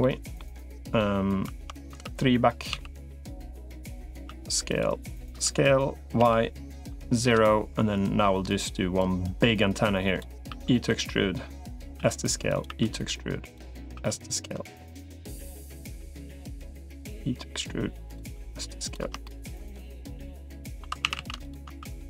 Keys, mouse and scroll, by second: 0.6 middle click, 1.9 3, 2.5 s, 4.1 s, 5.1 s, 8.9-10.1 drag, 10.3 e, 11.5 e, 11.9 s, 12.5 e, 13.7 s, 15.5-16.7 drag, 16.9 e, 18.1 s, 19.0 shift+middle click, 19.5 middle click, 20.7 2, 20.9 a, 21.1 a, 21.7 s.